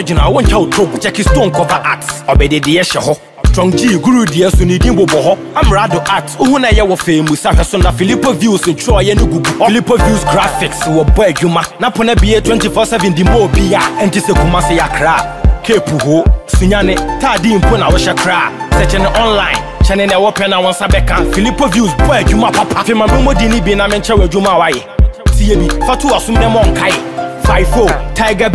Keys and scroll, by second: 1.3 ctrl+t, 6.7 Return.